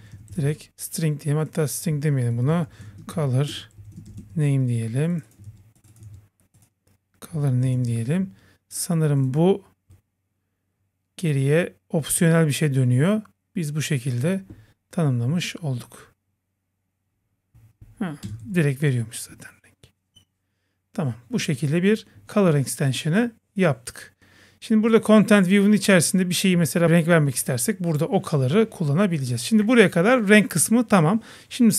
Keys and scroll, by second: 6.1 super+v, 18.5 super+s, 22.4 super+s.